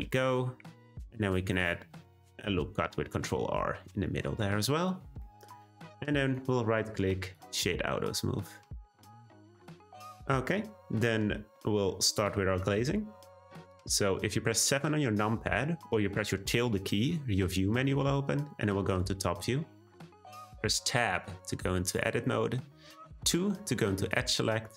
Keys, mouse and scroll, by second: 0.7 r, 2.0 Tab, 2.6 middle click, 3.2 Tab, 4.4 Tab, 5.2-5.9 middle drag, 5.9 click, 6.3-7.3 right drag, 7.3 click, 7.7-8.2 middle drag, 8.2-9.2 scroll up 3, 9.2-10.2 middle drag, 10.2-10.9 scroll down 1, 10.9-11.4 scroll down 1, 12.1 click, 16.6 `, 20.4 Tab, 21.8 click, 23.2 2.